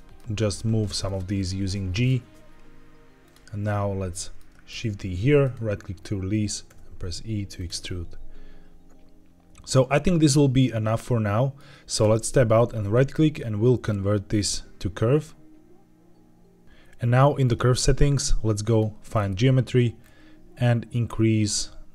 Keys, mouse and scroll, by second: 0.2 g, 0.9 click, 1.3 middle click, 3.1 click, 3.6 middle click, 4.6 shift+d, 5.3 right click, 6.6 e, 7.5 click, 7.7-11.5 middle drag, 11.9 Tab, 12.7-16.6 right drag, 17.3 click, 18.6 click, 19.0-19.9 scroll down 3, 19.9-20.8 scroll down 1, 20.8-21.9 drag.